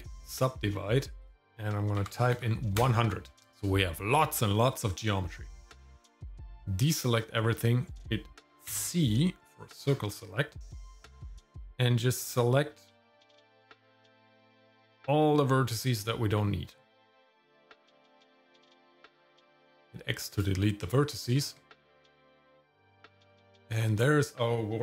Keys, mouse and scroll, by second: 1.2-2.3 drag, 2.3 KP_0, 2.8 click, 6.3 click, 8.7 c, 19.6 x, 21.4 Tab, 22.4 shift+middle click, 22.8 shift+z, 23.4 shift+middle click.